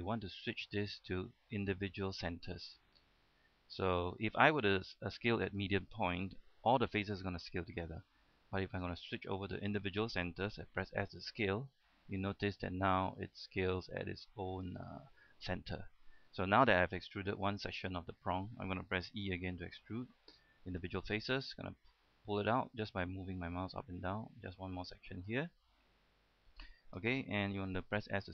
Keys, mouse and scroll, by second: 0.9 click, 6.8 s, 8.1 right click, 8.9 click, 11.1 s, 14.7 click, 15.0 middle click, 15.9-16.3 scroll down 1, 16.3-16.6 scroll up 1, 16.7 shift+middle click, 18.1 shift+middle click, 18.4-18.7 scroll down 1, 18.7 middle click, 19.6 e, 20.9 click, 25.7-26.8 middle drag, 28.2 s.